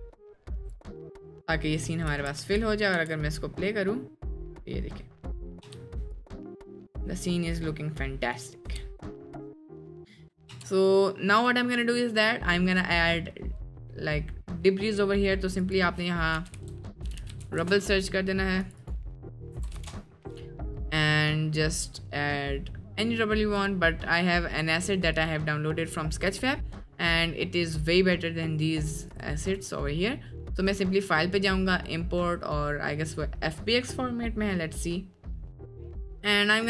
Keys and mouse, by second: 0.6 click, 2.2 ctrl+s, 2.4 space, 3.0 space, 6.2 click, 6.2 space, 6.9-7.2 middle drag, 8.3 click, 11.0 click, 11.0 space, 15.6-18.4 drag, 17.2 b, 18.8-20.2 drag, 23.6 click, 25.1-28.5 drag, 31.6-34.0 drag.